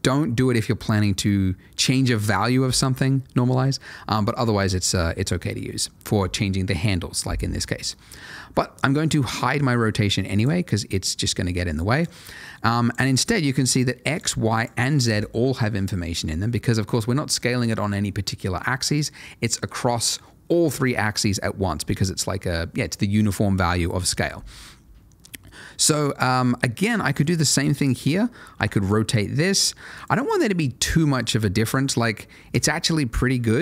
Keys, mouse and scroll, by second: 9.2 click, 14.1 double click, 25.2 middle click, 25.9 scroll down 1, 26.2 middle click, 27.2 click, 28.5 r, 29.9 click, 32.5 space.